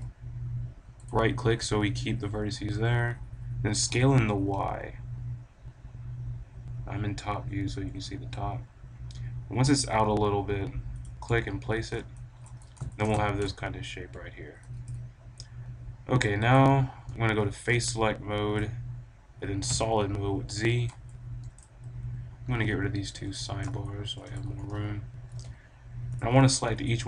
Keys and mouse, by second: 1.0-2.9 right drag, 3.6 s, 11.0-13.7 drag, 13.1 a, 16.7-18.3 drag, 18.3-19.5 middle drag, 19.6 z, 21.1 click, 21.6-22.7 drag, 22.6 t, 23.1 n, 23.8-25.5 drag, 25.2 b, 25.5 middle click.